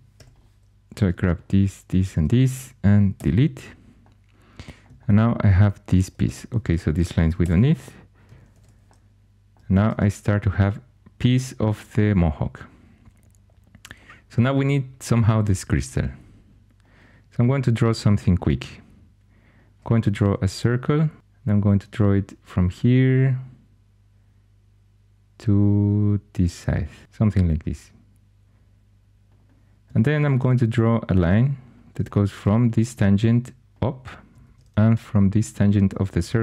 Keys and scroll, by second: 0.1 4, 3.1 x, 6.2 2, 7.4 x, 8.5 alt+h, 26.8-27.5 typing, 30.3 shift+a, 34.3 shift+a.